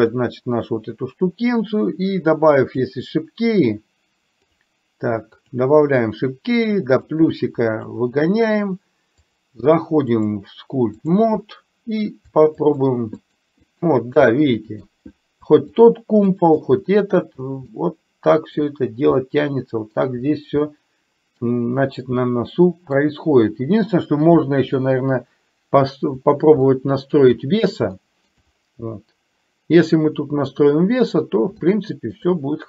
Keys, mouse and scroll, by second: 0.1 click, 5.4 click, 6.0 click, 7.3 click, 10.3-11.3 drag, 12.6 shift+click, 13.3 shift+click, 13.8 shift+click, 14.4 middle click, 15.9 shift+click, 16.4 shift+click, 17.8 middle click, 19.3 middle click, 20.8-23.0 middle drag, 26.8 shift+middle click, 28.0 shift+middle click, 31.8 shift+middle click.